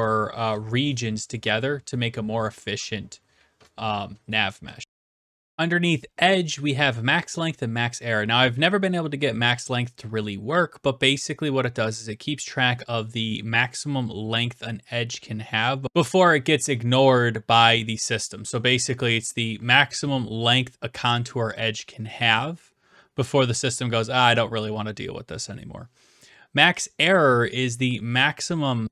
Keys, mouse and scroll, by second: 4.4 right click, 9.6 d, 10.0 right click.